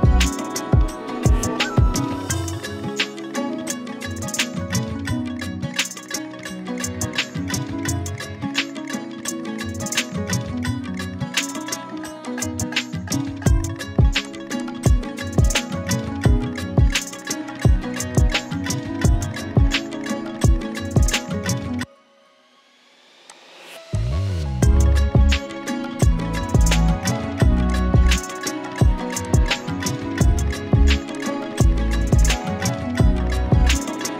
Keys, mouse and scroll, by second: 11.5-13.8 drag, 14.1 z, 14.3 click, 14.5 space, 14.6 click, 18.1 click, 18.8 right click, 23.3 click, 26.2 Return, 27.7 click, 29.2-30.4 shift+drag.